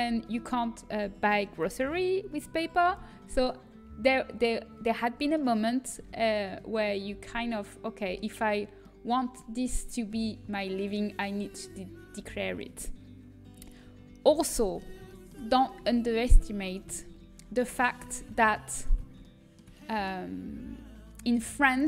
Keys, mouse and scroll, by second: 6.5-9.6 middle drag, 10.5-12.1 middle drag, 14.4-15.4 middle drag, 16.9 click, 16.9-19.4 right drag, 18.1 ctrl+z, 19.1 click, 19.4 middle click.